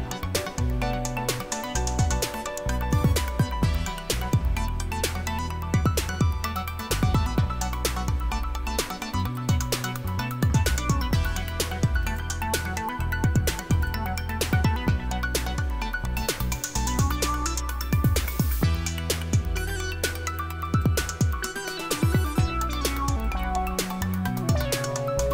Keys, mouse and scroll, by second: 2.6-5.0 scroll down 2, 5.0-8.9 scroll up 2, 9.2 click, 12.1 click, 13.8 click, 18.2 click, 20.7 click, 23.2 click.